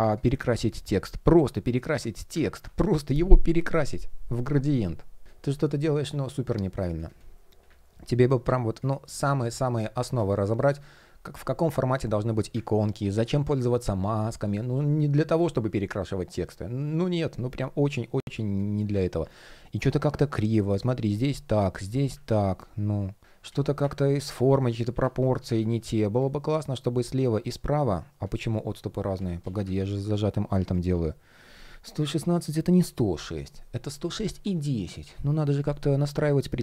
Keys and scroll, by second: 0.1 super+v, 5.2 super+z, 10.5 shift+o, 19.4 shift+p, 21.9 super+z, 23.2 shift+o, 28.1 shift+p, 28.8 super+z, 29.3 super+z, 36.0 shift+p.